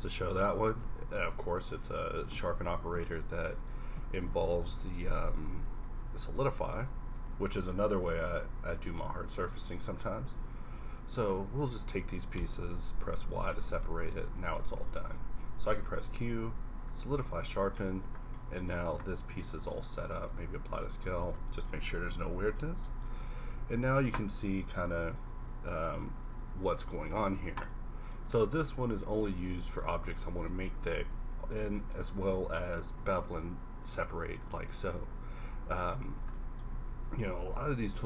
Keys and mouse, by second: 0.8 Tab, 1.0 KP_7, 1.3 KP_5, 1.9 KP_Decimal, 2.8 s, 3.6 click, 4.0 a, 4.6 k, 10.4 ctrl+Tab, 12.4 y, 13.1 g, 13.9 Tab, 15.5 q, 19.6 ctrl+a, 25.1-26.8 drag, 35.5 2, 36.7 shift+c, 37.4 shift+a.